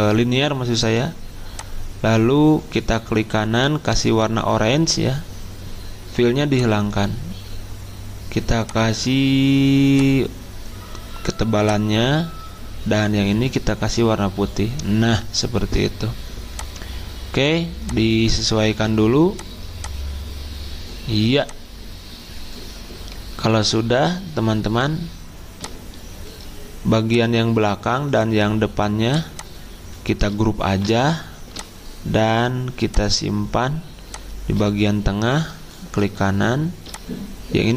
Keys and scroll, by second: 30.6 ctrl+g.